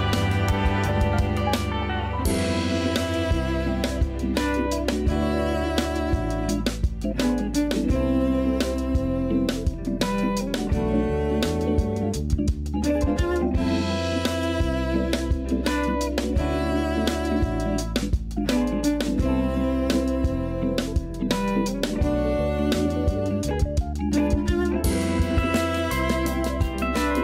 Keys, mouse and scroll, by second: 1.6-5.2 middle drag, 5.2-6.0 scroll up 2, 6.0 click, 6.5 Tab, 8.1 k, 9.5 l, 9.8-10.3 scroll down 2, 10.3 KP_1, 10.9-11.4 scroll up 3, 11.4 shift+d, 12.0 g, 16.8 scroll up 2, 17.2 s, 18.2 scroll up 4, 18.5 g, 21.4 scroll down 4, 21.7 a, 21.9 a, 22.2 Tab, 22.5 scroll down 1, 22.8 a, 23.0 a, 23.1 scroll down 1, 24.0 shift+middle click, 24.7-25.6 scroll down 1, 25.6-26.2 scroll up 2, 26.2 click.